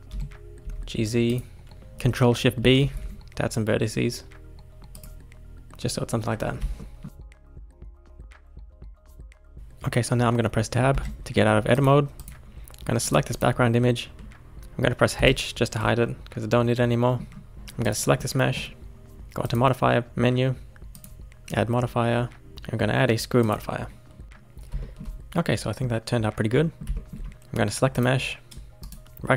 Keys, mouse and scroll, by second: 0.1 g, 2.6 ctrl+shift+b, 6.3-6.7 scroll down 3, 6.7 shift+middle click, 7.1 scroll down 4, 7.2 shift+middle click, 7.6 alt+z, 7.8 scroll down 1, 8.0 shift+middle click, 8.6 scroll down 1, 8.8 shift+middle click, 10.9 Tab, 11.7 click, 12.1 click, 13.0 click, 13.3 click, 15.1 h, 16.0-17.5 middle drag, 17.5-17.8 scroll up 1, 17.8 click, 18.2-19.4 middle drag, 19.4 click, 20.9-22.8 drag, 24.8-27.4 shift+middle drag, 27.9 click, 28.8-29.3 right drag.